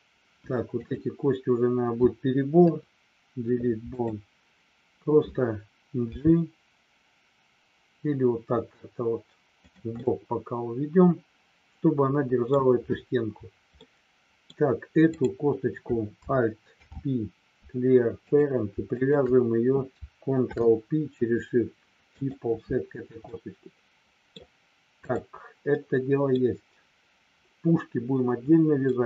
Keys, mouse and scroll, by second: 2.6 Delete, 10.0-12.5 middle drag, 10.0 scroll up 1, 13.8 scroll up 1, 13.9 middle click, 15.0 click, 16.8 alt+p, 18.9 shift+click, 20.4 ctrl+p, 23.2-24.4 middle drag, 24.9 click, 25.6 middle click, 28.9 middle click.